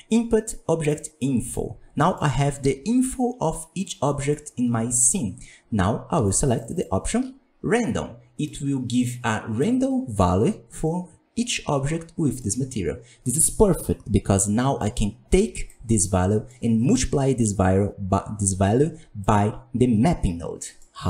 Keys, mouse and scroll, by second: 6.2 ctrl+shift+click, 6.6 ctrl+shift+click, 6.8 ctrl+shift+click, 8.1-8.4 scroll down 2, 8.4-17.3 middle drag, 17.3-21.0 drag.